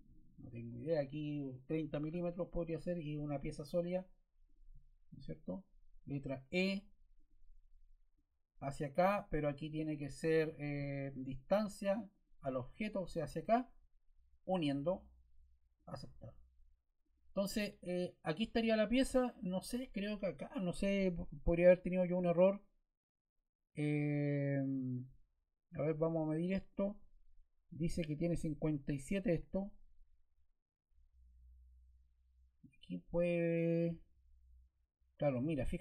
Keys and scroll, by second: 1.6 3, 2.0 0, 6.4 e.